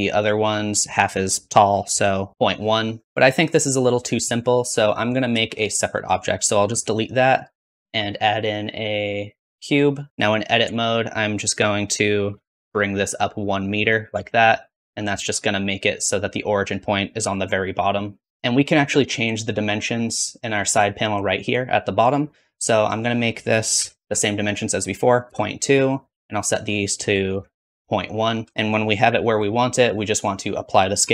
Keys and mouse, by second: 3.0-6.1 middle drag, 6.2 click, 6.6 x, 7.2 click, 7.9 shift+a, 10.5 Tab, 12.1 g, 14.0 Tab, 17.3 r, 18.3 n, 22.7-29.0 drag, 29.0 KP_Decimal, 29.4-31.1 drag, 31.0 ctrl+a.